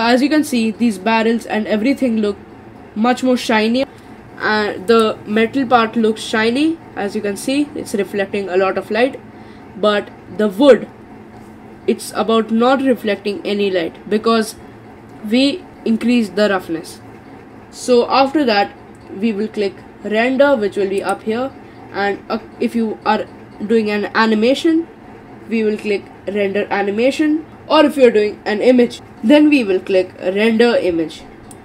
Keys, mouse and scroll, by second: 4.9 click, 21.0-24.2 drag.